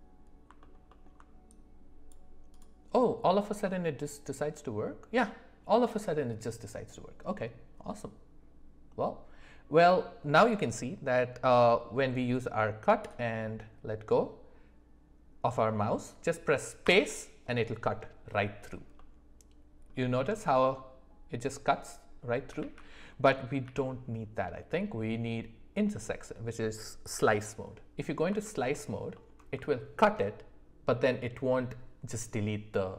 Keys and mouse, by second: 0.6 alt+middle click, 0.9 alt+middle click, 1.5-2.8 drag, 5.0 click, 18.9 middle click, 20.2 middle drag, 22.6 ctrl+z, 23.6 d, 28.4 alt+middle click, 28.7 alt+middle click.